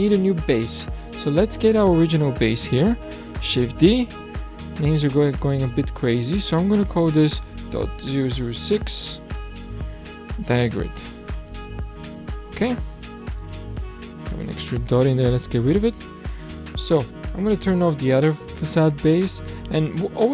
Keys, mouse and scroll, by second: 1.1 click, 2.3 click, 3.5 shift+d, 5.0 click, 5.3-8.2 drag, 8.2 KP_0, 13.2 click, 17.9 click, 18.8-20.3 scroll up 2.